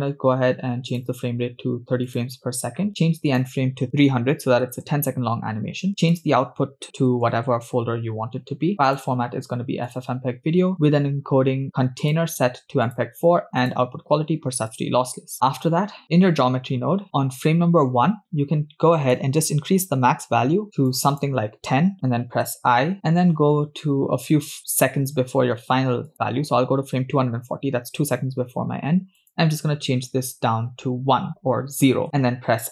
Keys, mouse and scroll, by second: 0.9-2.3 drag, 3.3-4.9 drag, 4.5 0, 6.0 scroll down 1, 6.1-7.6 drag, 7.2 /, 8.6 scroll down 1, 8.9-10.2 drag, 10.5-10.9 scroll down 3, 10.9 click, 12.0-13.2 drag, 13.6-14.9 drag, 15.3 middle click, 15.3 scroll down 2, 16.0 middle click, 16.0 scroll up 3, 16.6 scroll up 1, 17.0 drag, 19.1-21.9 drag, 23.0-23.3 scroll down 2, 23.0 i, 26.5-27.0 drag, 29.2-32.0 drag.